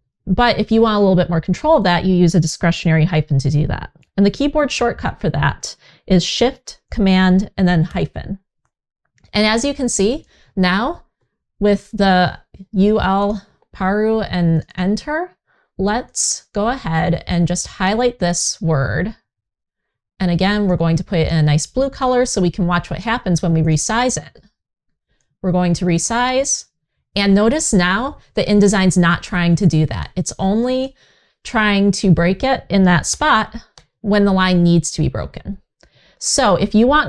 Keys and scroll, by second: 7.6 shift+super+-, 32.8 super+z.